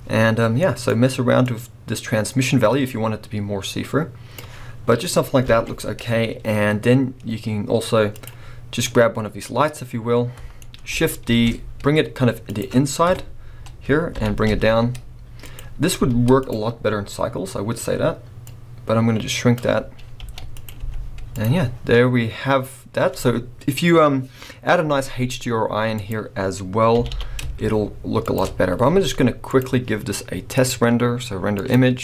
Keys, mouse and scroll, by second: 8.8-12.6 middle drag, 11.3 shift+d, 12.6 click, 13.1 KP_0, 14.2 g, 15.6 click, 16.5 z, 18.7-20.6 drag, 20.2 g, 22.9-23.5 scroll down 1, 26.1 click, 27.0 r, 28.4 shift+click, 28.6 scroll up 1, 29.6 z.